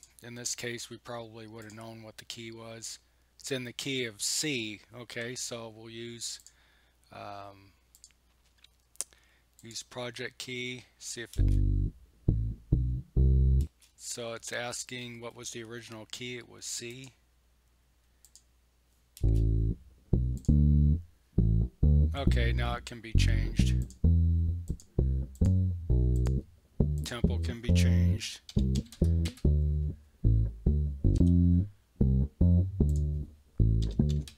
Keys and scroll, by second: 11.3 space, 13.6 space, 19.2 space, 28.5 1, 29.3 Return, 31.2 Home, 33.6-34.3 typing.